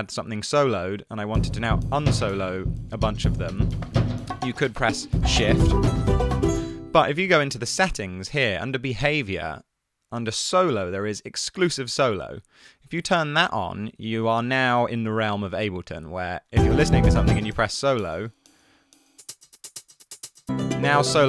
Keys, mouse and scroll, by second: 7.2 space, 7.4 super+,.